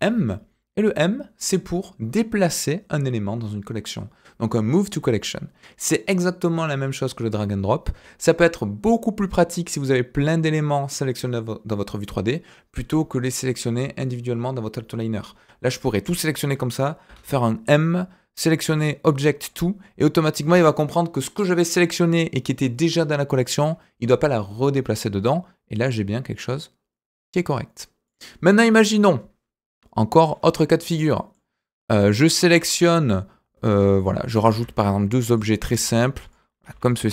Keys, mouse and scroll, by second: 15.4-15.8 scroll down 1, 15.8 click, 17.0 m, 28.0 click, 30.2 click, 31.1 middle click, 32.0 click, 32.5 shift+a, 34.4 shift+a, 35.7 s.